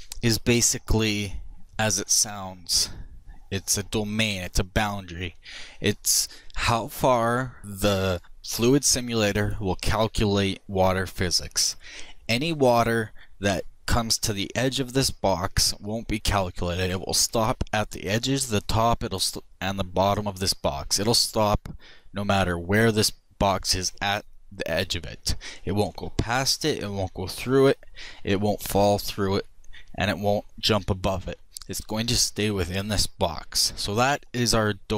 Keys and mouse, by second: 23.8 middle click.